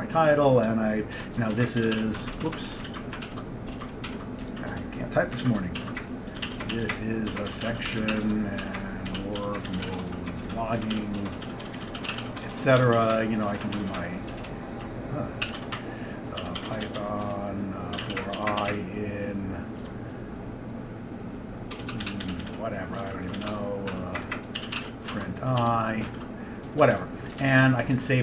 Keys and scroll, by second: 1.2 Return, 1.4-20.0 typing, 3.0 ctrl+d, 4.6 ctrl+d, 5.5 ctrl+d, 21.6-28.1 typing.